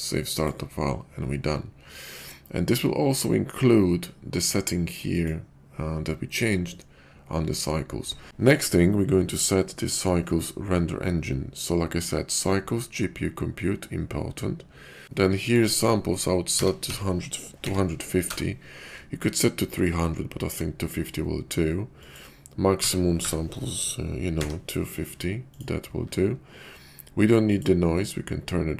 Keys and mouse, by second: 5.2-6.0 drag, 15.6-18.4 drag, 21.9-25.6 drag, 27.3 click.